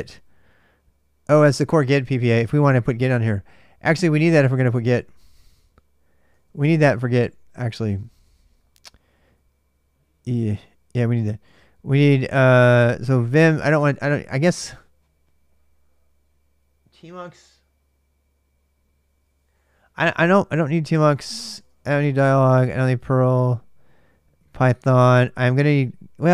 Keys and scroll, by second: 0.0-0.4 typing, 1.5 ctrl+[, 1.6 u, 3.0 ctrl+[, 3.1 shift+u, 4.3-10.5 typing, 11.9-13.5 typing, 20.1-23.0 typing.